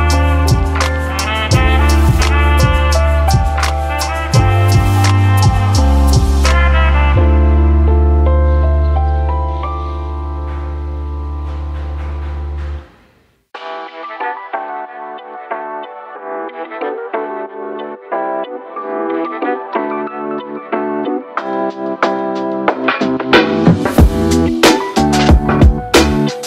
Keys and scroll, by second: 2.5 ctrl+d, 3.9 ctrl+d, 22.1-23.5 typing, 24.9-25.8 typing.